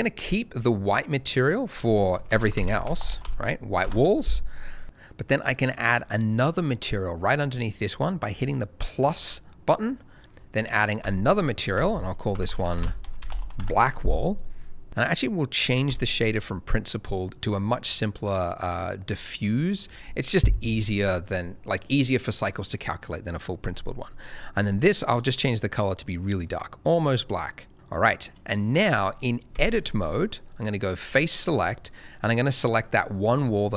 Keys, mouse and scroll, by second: 1.6 click, 2.1-3.2 typing, 3.8 Return, 9.0 click, 11.0 click, 12.3-13.4 typing, 13.5 Return, 15.8 click, 24.6 click, 28.8 middle click, 29.5 Tab, 30.9 click, 31.5 middle click, 32.6 click, 33.1 middle click, 33.3 scroll up 1.